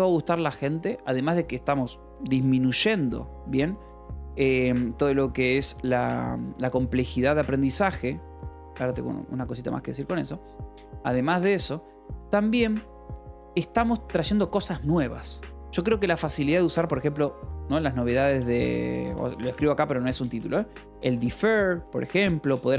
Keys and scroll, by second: 18.7 BackSpace, 19.8-22.7 typing.